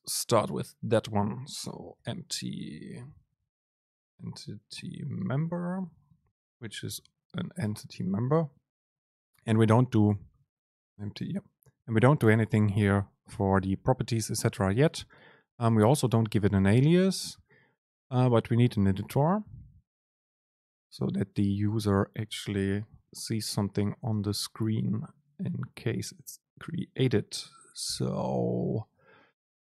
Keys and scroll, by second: 2.6 BackSpace, 6.5 BackSpace, 6.5 super+space.